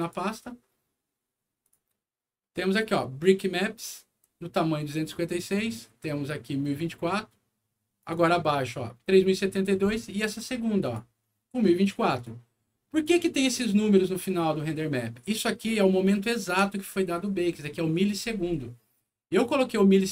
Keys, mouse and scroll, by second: 1.6 click, 2.6 click, 5.3 click, 7.9 click, 10.8 click, 12.1 click, 12.9 click, 16.0 ctrl+scroll up 1, 19.4 ctrl+click.